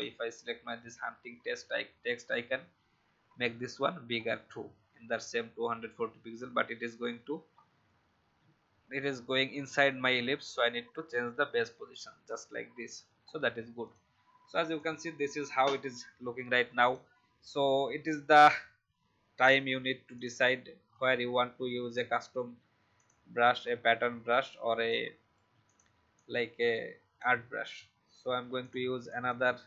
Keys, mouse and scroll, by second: 7.5-7.8 alt+scroll up 1, 13.2 alt+scroll down 1, 13.8 click, 18.4-19.8 alt+scroll down 1, 20.1 click, 20.8-21.4 scroll up 1, 21.5-22.9 alt+scroll up 1, 22.9 click, 23.6-23.9 alt+scroll up 1, 24.8-27.4 drag, 28.3 a, 28.5-29.6 drag.